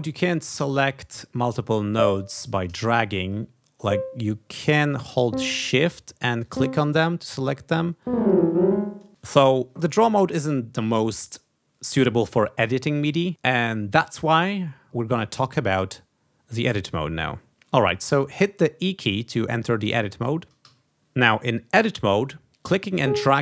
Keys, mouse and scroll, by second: 0.5-2.1 drag, 2.8 ctrl+z, 3.7 shift+click, 5.2 shift+click, 6.4 shift+click, 7.8-9.1 drag, 17.5 d, 20.6 e, 22.6-23.4 drag.